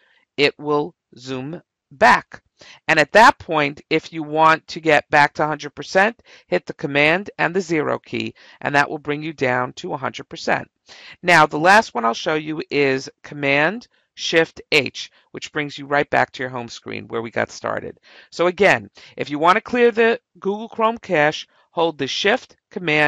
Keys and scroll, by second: 0.3 -, 0.9 -, 1.9 -, 3.9 =, 7.5 0, 14.7 h.